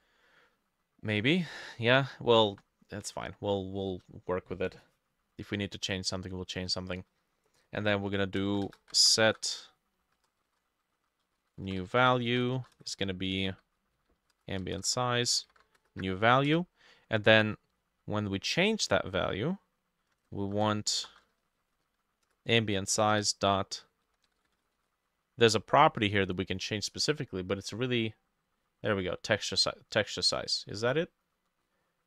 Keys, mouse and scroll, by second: 8.3-16.3 typing, 8.5 middle click, 9.2 middle click, 10.4 shift+middle click, 12.8 Return, 14.4-15.4 drag, 16.5 Return, 20.4-25.3 typing.